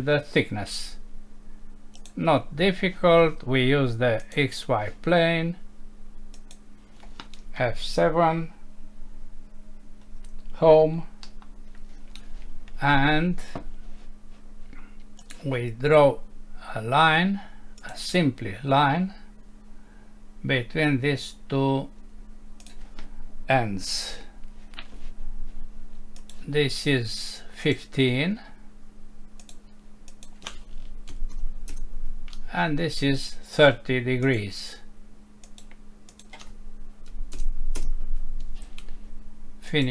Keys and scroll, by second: 10.0 F7, 11.2 Home, 24.0 Escape, 31.7 Return, 37.8 Return.